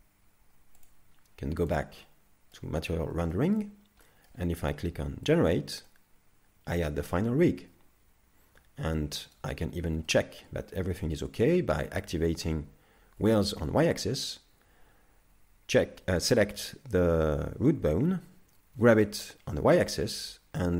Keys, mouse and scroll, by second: 0.8 click, 2.0 middle click, 2.8-3.3 scroll up 3, 3.3 shift+middle click, 3.7 scroll down 2, 4.1 middle click, 5.3 click, 5.9 middle click, 9.8 right click, 9.8 scroll up 2, 10.1 shift+middle click, 11.0-12.4 scroll down 1, 13.2 click, 16.2 right click, 18.7 g.